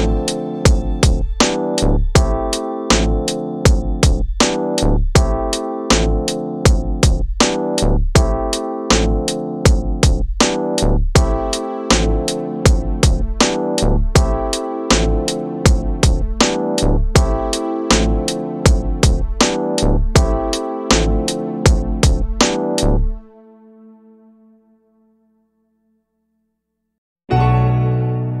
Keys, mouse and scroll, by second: 4.0-6.8 drag, 8.5 click, 9.9 middle click, 10.6-11.3 scroll up 1, 12.0-14.6 right drag, 17.4-28.4 drag.